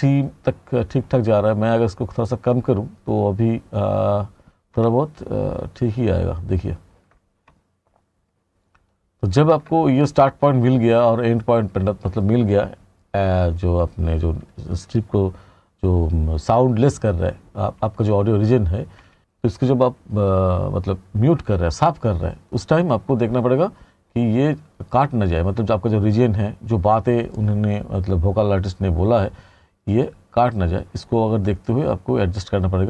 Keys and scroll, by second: 4.5 t, 18.5 r.